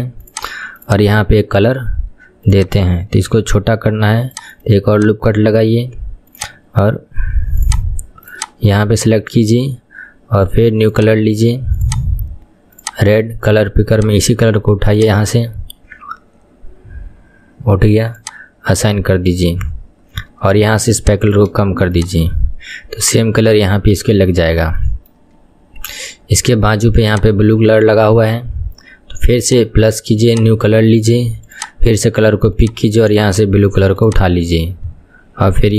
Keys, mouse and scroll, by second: 0.4 click, 2.7 click, 3.3 ctrl+r, 5.1 click, 6.5 click, 7.7 click, 11.0-15.0 drag, 18.3-22.0 drag, 23.3-23.7 scroll down 1, 23.7 shift+middle click, 24.3-24.9 scroll up 2, 24.9-27.3 shift+middle drag, 27.3 click, 29.5-34.1 drag.